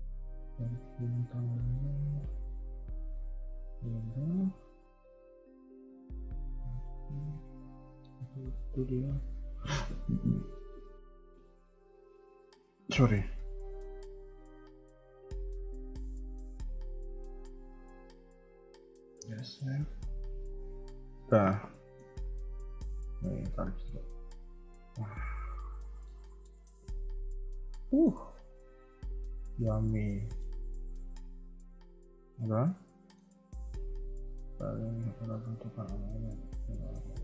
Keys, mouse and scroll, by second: 0.1 g, 3.8 KP_3, 4.0 KP_1, 4.4 Tab, 5.2 scroll down 1, 5.8 middle click, 8.1 KP_1, 9.1 click, 9.5 scroll down 1, 9.6 KP_3, 9.8 KP_1, 10.3 scroll up 1, 10.3 Tab, 10.8-11.1 scroll up 2, 11.7 click, 12.3 g, 13.7 click, 13.9 g, 15.0 click, 15.1 g, 18.0 g, 19.3 middle click, 22.9 click, 23.2 g, 25.5 middle click, 26.2 shift+middle click, 26.5 middle click, 29.0 KP_1, 29.6 KP_3, 30.2 shift+middle click, 30.7 middle click, 32.1 KP_3, 32.4 scroll down 2, 32.7 middle click, 33.3 Tab, 33.6 middle click.